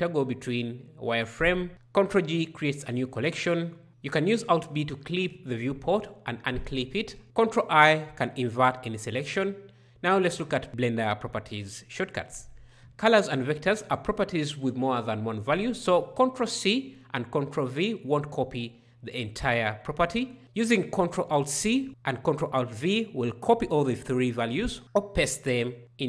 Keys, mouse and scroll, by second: 1.7 ctrl+d, 3.8 alt+b, 7.2 ctrl+i.